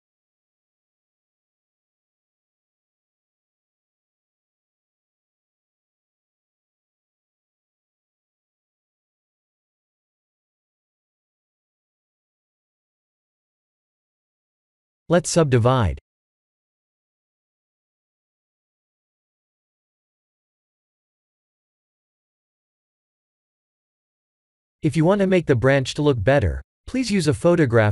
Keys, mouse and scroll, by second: 0.8 e, 1.6 g, 3.1 s, 4.6 e, 4.8 g, 6.7 e, 8.4 ctrl+z, 8.8 s, 9.8 e, 10.5 g, 14.2 s, 15.9 r, 18.0 Tab, 20.1 ctrl+3, 20.5-23.0 middle drag, 23.8 click, 24.8 click, 27.8 click.